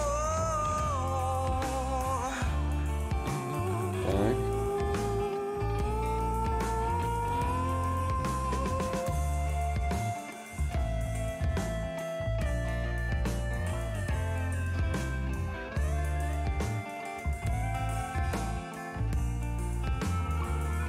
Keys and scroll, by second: 0.4 x, 5.0 x, 6.2 ctrl+z.